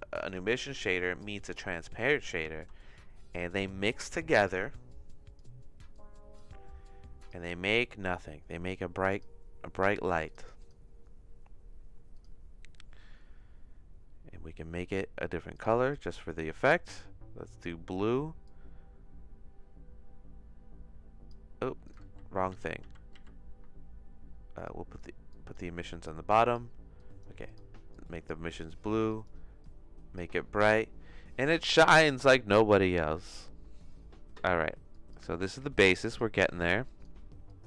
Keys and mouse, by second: 0.2 click, 1.8 click, 2.4 shift+a, 4.9 click, 5.9 click, 6.9 click, 12.2 click, 14.8 click, 15.6 click, 18.4-21.3 drag, 22.5 ctrl+z, 22.8 ctrl+z, 23.1 ctrl+z, 24.6 click, 25.3 click, 26.1 click, 27.0 click, 29.0 click, 29.6 click, 34.9 click, 35.6 click, 36.8 click, 37.4 click.